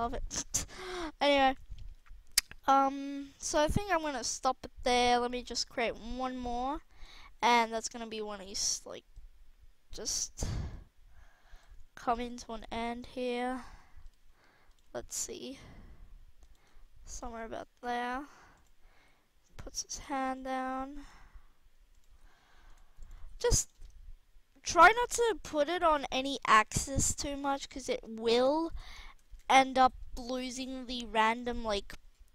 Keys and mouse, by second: 1.8 alt+a, 3.7 alt+a, 7.6 KP_3, 12.4-13.6 drag, 12.4 g, 13.4 r, 14.1 g, 14.7 r, 16.5 g, 18.5-19.7 right drag, 18.9 r, 19.7-20.0 drag, 20.6 r, 22.1 r, 23.1 r, 23.5-24.1 drag, 24.4-24.7 middle drag, 26.1 alt+r, 27.2 KP_1, 29.0 a, 29.2 a, 29.7 i.